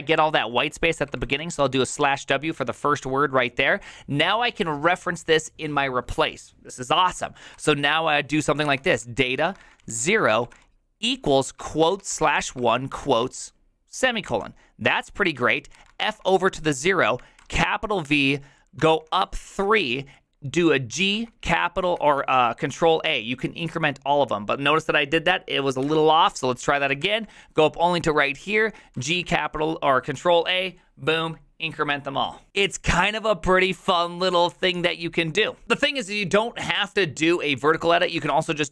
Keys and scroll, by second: 0.7 Left, 0.9 Left, 1.0 Left, 1.2 Left, 1.4 typing, 2.3 Right, 2.4 Right, 2.6 Right, 2.8 Right, 7.5 typing, 8.7-13.2 typing, 14.2 Return, 15.7-19.8 typing, 20.9 typing, 21.2 ctrl+a, 21.9 ctrl+a, 25.6-29.8 typing, 37.7-38.7 typing.